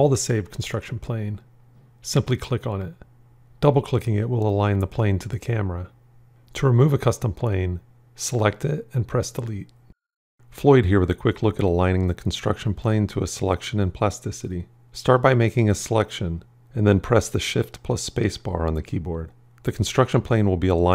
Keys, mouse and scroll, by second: 9.0 Delete, 17.7 shift+space.